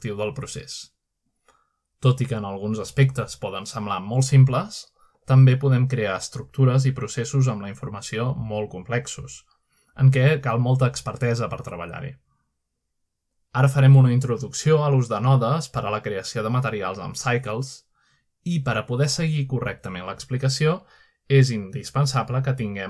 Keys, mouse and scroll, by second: 1.2 click, 3.5 click, 4.3-4.6 scroll down 1, 4.6 scroll up 1, 5.2-7.2 shift+middle drag, 7.6 click, 8.2-8.8 shift+middle drag, 9.0 scroll down 2, 9.6 middle click, 10.4 scroll up 3, 10.6-11.0 scroll down 3, 12.4 click, 13.7-14.5 scroll up 2, 14.5 click, 15.6 click, 16.2 click, 17.2 scroll up 1, 17.6 scroll down 1, 20.3 click.